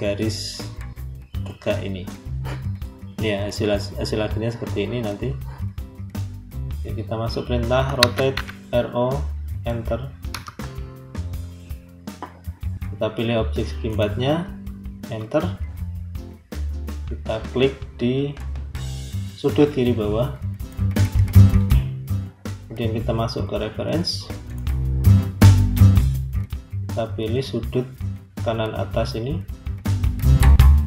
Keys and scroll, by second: 7.9 r, 8.2 o, 10.2 Return, 14.9 Return.